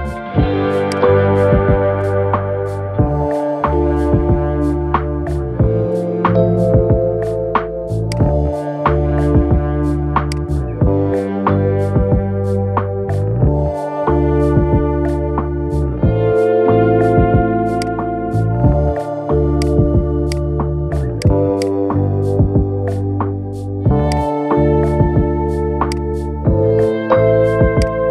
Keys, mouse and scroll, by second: 0.6-1.8 drag, 1.8-3.2 middle drag, 3.2-3.7 scroll down 2, 3.7-4.7 scroll up 2, 4.7 Tab, 5.6 scroll up 1, 5.9 scroll down 5, 6.7-7.8 middle drag, 7.8 click, 8.1 scroll up 2, 9.2-10.0 scroll up 1, 10.0 click, 10.4 scroll down 3, 11.9 scroll down 1, 12.8-14.9 shift+middle drag, 14.9 scroll up 2, 15.2-17.6 middle drag, 17.6-19.4 drag, 20.0 click, 23.8-25.8 drag, 26.9 scroll down 2, 27.5 click.